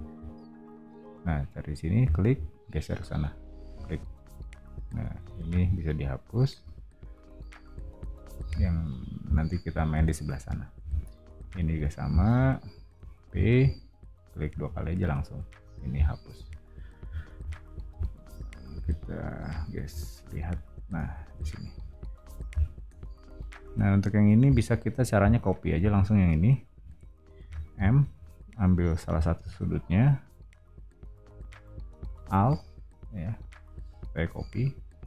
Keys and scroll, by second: 5.3 e, 7.7 o, 13.4 p, 15.6 e, 17.2 o, 25.9 space, 27.7 m.